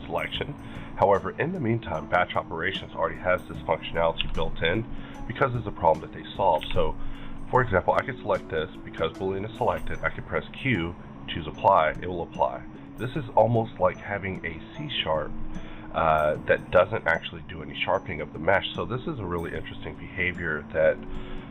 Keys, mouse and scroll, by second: 1.8-4.7 drag, 4.1 b, 5.0 click, 5.4 middle click, 6.6 alt+a, 6.6 middle click, 7.2 click, 9.6 q, 11.3 click, 11.8-13.2 middle drag, 12.8 click, 13.2-15.7 middle drag, 15.7-16.0 scroll up 2, 16.3-16.7 middle drag, 17.7 click, 19.6-21.5 drag.